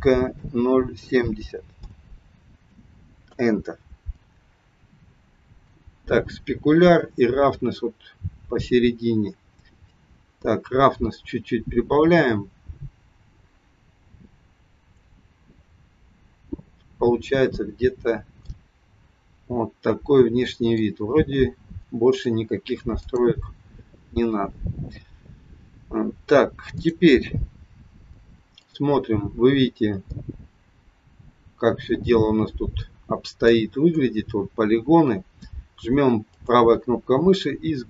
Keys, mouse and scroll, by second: 23.1 click, 26.8 click, 27.3-27.7 scroll up 2, 28.6 click, 29.0-29.7 scroll up 2, 30.1 middle click, 33.7 scroll down 1, 34.6 scroll down 1, 36.2 right click.